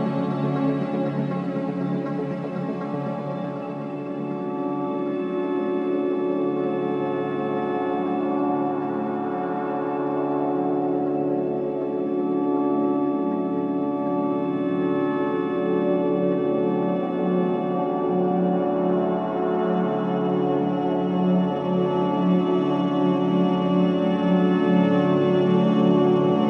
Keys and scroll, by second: 8.0 4, 19.6 3, 20.8 4, 21.4 3, 23.5 ], 26.1 4.